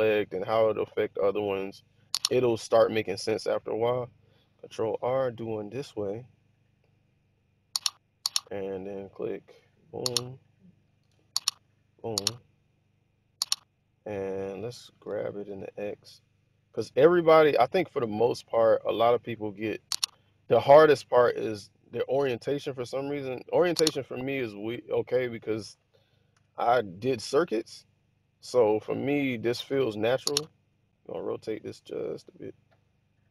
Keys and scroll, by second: 4.7 ctrl+r, 11.0 super+z, 15.0 g, 15.6 x, 22.8-23.7 typing, 25.4-26.3 typing, 29.7 r.